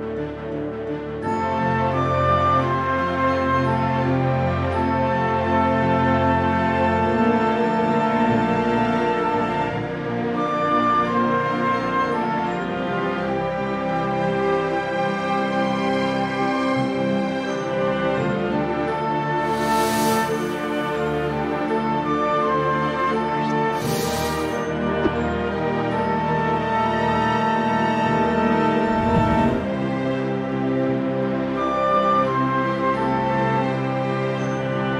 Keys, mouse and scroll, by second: 0.1 middle click, 0.3 scroll down 2, 0.4 alt+a, 0.5 click, 0.5 m, 2.1 Return, 2.4 click, 2.6 click, 2.6 KP_Decimal, 2.7 scroll down 4, 2.8 shift+middle click, 2.8-3.2 scroll up 1, 3.2 middle click, 3.2 click, 4.9 click, 5.5 click, 5.8 scroll up 4, 5.8 shift+middle click, 6.0 click, 6.2 scroll down 3, 6.2 shift+middle click, 6.6 click, 6.6-7.3 scroll up 4, 6.7 click, 6.9 click, 7.1 middle click, 7.1 shift+middle click, 7.2 middle click, 7.4 middle click, 7.4 scroll down 2, 7.5 scroll up 3, 7.6 alt+a, 7.7 shift+middle click, 7.7 scroll down 9, 7.9 middle click, 8.6 scroll down 8, 8.8 middle click, 9.1 shift+g, 9.3 middle click, 9.4 scroll down 5, 9.5 click, 9.8-10.1 scroll up 1, 9.8 shift+g, 10.5 click, 10.5-10.9 scroll up 2, 10.6 alt+a, 10.6 shift+middle click, 10.7 KP_1, 10.9 middle click, 11.0 scroll down 1, 11.0 click, 11.1 shift+click, 11.3 shift+click, 11.4 r, 11.6-12.1 scroll up 7, 11.8 middle click, 11.8 click, 12.0 middle click, 12.2 click, 12.4 alt+a, 12.4 KP_1, 12.5 shift+middle click, 12.5 scroll down 1, 12.7 click, 12.8 shift+g, 13.0 click, 13.3 alt+a, 13.4 scroll up 3, 13.4 shift+middle click, 13.5 click, 13.6 alt+a, 13.7 scroll down 5, 13.8 shift+middle click, 13.8-14.3 scroll up 9, 13.9 click, 14.2 shift+middle click, 14.3 shift+middle click, 14.3 click, 14.5 m, 15.1 click, 15.3 m, 16.6 Return, 16.6 alt+a, 16.7 scroll down 11, 16.8 shift+middle click, 16.9 shift+middle click, 16.9-17.4 scroll up 3, 17.2 alt+a, 17.2 click, 17.3 shift+middle click, 17.4 click, 18.1 click, 18.2 shift+middle click, 18.2 scroll down 2, 18.3 middle click, 18.3-18.8 scroll up 8, 18.5 shift+middle click, 18.5 click, 18.8 click.